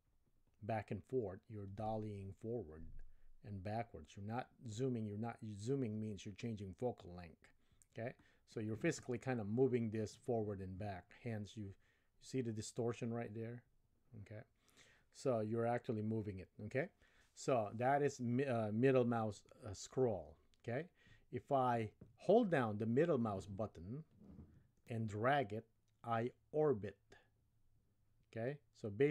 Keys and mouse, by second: 24.9-29.1 middle drag.